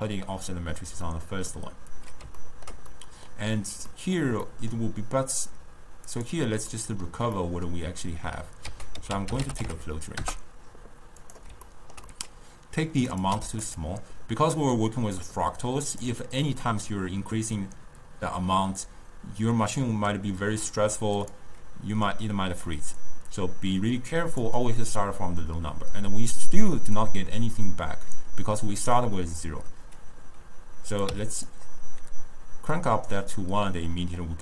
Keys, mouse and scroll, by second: 6.2 click, 6.8-8.8 middle drag, 8.8 ctrl+a, 11.8-13.2 ctrl+middle drag, 13.2 click, 14.8 click, 15.8 click, 21.3 click, 23.1 drag, 31.0 click.